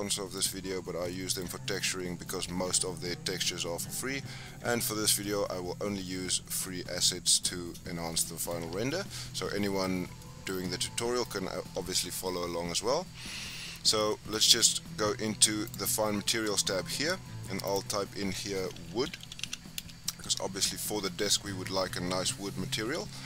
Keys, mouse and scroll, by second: 0.4-1.1 scroll up 4, 1.1-1.6 shift+middle drag, 1.6-2.0 scroll down 4, 2.0 scroll up 2, 5.2-7.5 middle drag, 7.5-8.0 scroll up 2, 8.0 scroll down 1, 8.1-13.7 middle drag, 14.1-15.7 shift+middle drag, 15.7 click, 17.7-19.2 drag, 19.2 o.